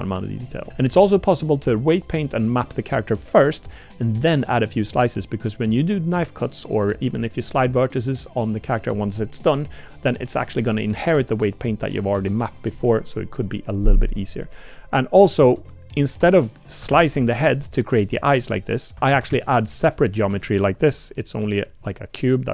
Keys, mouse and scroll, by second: 15.3 shift+drag, 15.7 middle click, 16.2 Tab, 16.9 ctrl+r, 19.1 ctrl+z, 19.3 ctrl+z, 20.2 Tab, 20.4 click, 21.1 click, 21.4 l, 21.9 click.